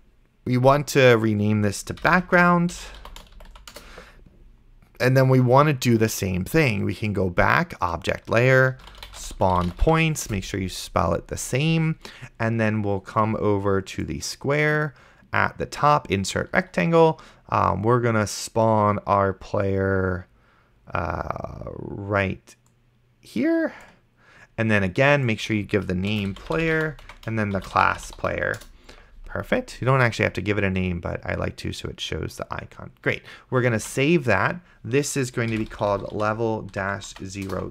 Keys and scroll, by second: 2.2-4.1 typing, 8.7-10.4 typing, 26.1-29.0 typing, 34.0 ctrl+s, 35.5-37.7 typing.